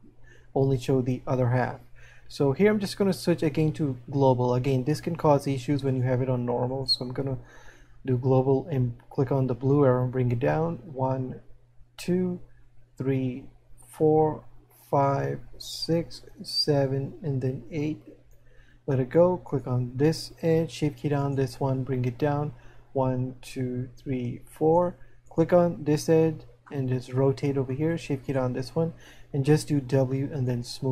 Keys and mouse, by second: 10.4 click, 22.8 click, 26.9 middle click.